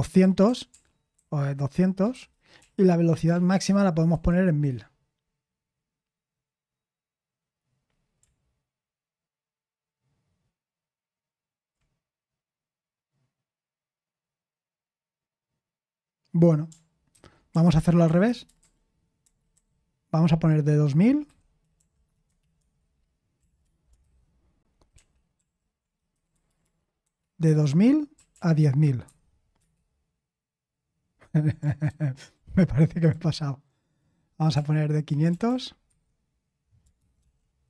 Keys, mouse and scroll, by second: 4.1 typing, 22.2-23.4 typing, 24.0 ctrl+c, 24.9 ctrl+l, 26.3 ctrl+p, 27.4 Left, 28.3 Left, 29.0 Left, 29.5 Left, 31.8 Left, 31.8 Right, 31.8 0, 32.3 Return, 32.7 ctrl+c, 35.3 ctrl+p, 35.3 Left, 35.4 Left, 35.8 Left, 36.9 Right, 36.9 BackSpace, 37.2 6.